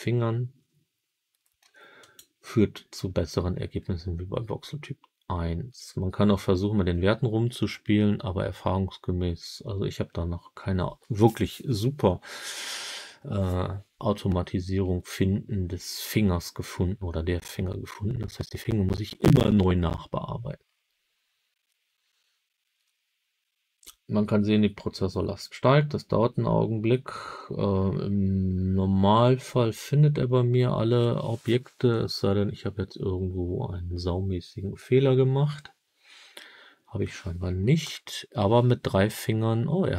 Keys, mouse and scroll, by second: 1.9-34.3 drag, 37.7 KP_7, 39.7-39.9 scroll up 9.